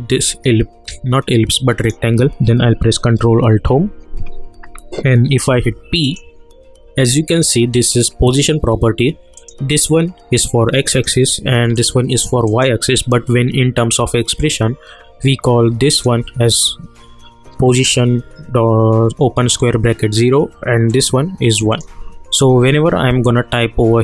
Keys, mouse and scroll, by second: 3.5 ctrl+alt+Home, 5.5 p, 6.0 click, 20.9 click.